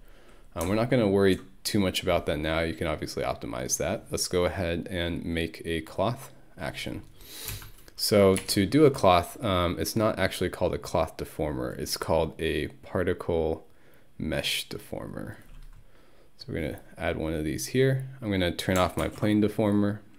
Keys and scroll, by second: 7.5 c, 8.4 BackSpace, 19.0 ctrl+1.